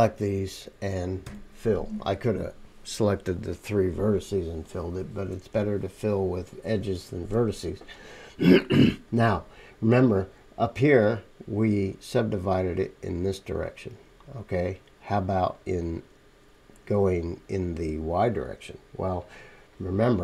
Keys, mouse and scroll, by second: 1.2 f, 4.4 click, 4.4-6.9 middle drag, 4.4 right click, 20.1 middle click.